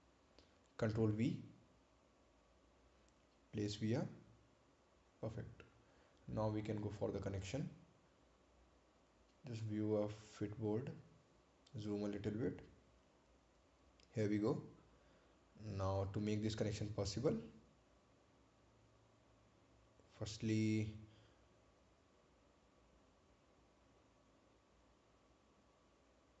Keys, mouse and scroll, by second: 0.3 click, 1.9 right click, 4.2 ctrl+v, 5.2 click, 6.1 right click, 7.2 scroll down 1, 10.8 click, 13.1 scroll up 1, 18.5 scroll up 1, 18.6 ctrl+click, 19.7 ctrl+click, 23.7 click, 26.1 click.